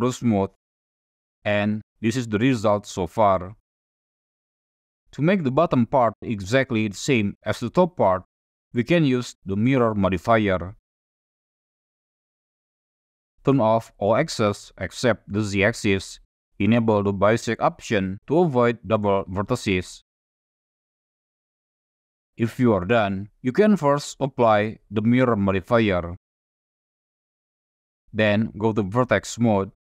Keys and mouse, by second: 1.0-1.7 drag, 1.7-2.3 middle drag, 4.2 middle click, 4.5-5.0 shift+middle drag, 5.8 shift+middle drag, 6.3 shift+middle drag, 6.9 shift+middle drag, 7.3 shift+middle drag, 9.5 middle click, 10.7-12.5 drag, 13.5 click, 14.6 click, 17.4 click, 18.5-19.6 middle drag, 20.6-20.9 shift+middle drag, 21.2 middle click, 21.7-22.0 shift+middle drag, 22.3 shift+middle drag, 22.8-23.5 middle drag, 24.8 click, 26.4 middle click, 26.9-27.3 shift+middle drag, 28.1-28.4 drag, 29.3 1.